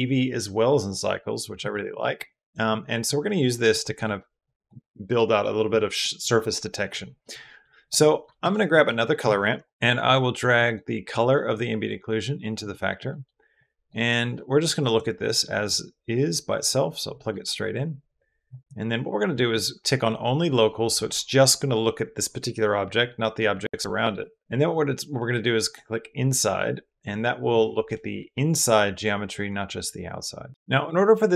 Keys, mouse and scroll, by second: 1.8 click, 2.9 click, 4.2 click, 7.0 click, 7.6 click, 8.0 click, 8.2 shift+a, 10.4 click, 10.9 click, 11.1 click, 11.3 click, 11.6-12.4 drag, 12.9 click, 13.4 click, 13.5 click, 14.6 click, 15.2-16.5 drag, 17.1-17.4 drag, 18.4 drag, 19.3 click, 25.5 middle click.